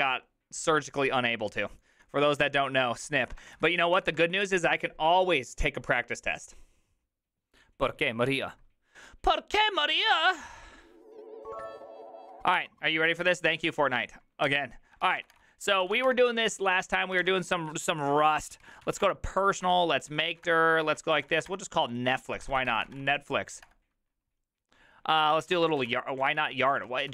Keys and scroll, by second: 4.1 Return, 4.1 typing, 15.0-16.0 typing, 15.8 ctrl+c, 16.1 Return, 17.2 ctrl+f, 18.3-23.6 typing, 23.7 Return, 25.0-27.1 typing.